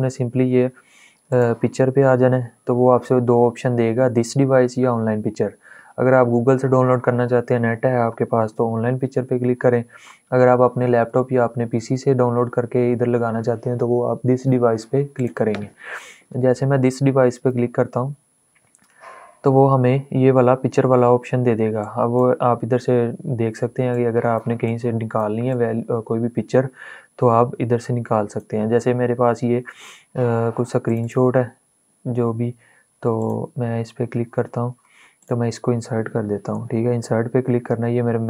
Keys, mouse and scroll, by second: 14.9 click, 15.0 click, 21.5-32.8 drag.